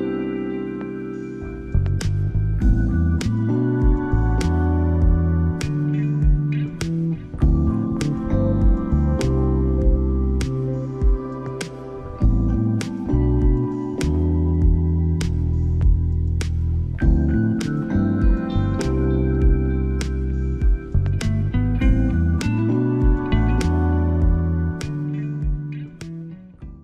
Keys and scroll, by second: 9.7 x.